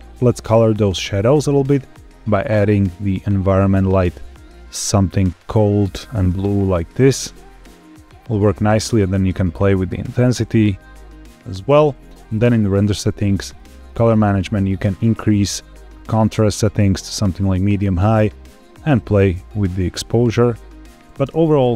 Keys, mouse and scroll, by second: 1.4 click, 1.7 click, 12.2 click, 12.7-13.5 scroll down 2, 13.5 click, 13.8-14.8 scroll down 2, 14.8-17.4 drag, 18.3-20.9 drag, 21.3 space.